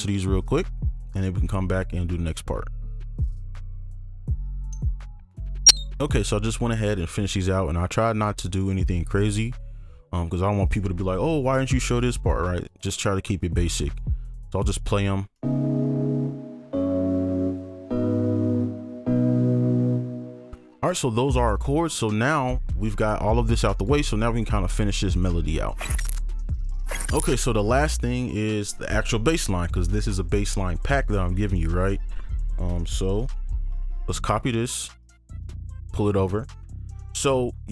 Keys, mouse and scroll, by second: 3.2 ctrl+click, 3.3 shift+2, 3.4 shift+click, 3.4 ctrl+Up, 3.5 shift+click, 3.5 shift+2, 3.6 shift+click, 3.6 scroll up 1, 3.8 ctrl+shift+click, 3.8 ctrl+Up, 4.4 right click, 4.9 double click, 4.9 right click, 5.0 ctrl+click, 5.1 ctrl+Up, 5.2 shift+click, 8.2 ctrl+click, 12.7 ctrl+click, 13.9 right click, 16.7 alt+right click, 17.8 alt+right click, 19.0 alt+right click, 31.4 ctrl+click, 33.4 ctrl+c, 35.0 right click, 37.0 ctrl+v.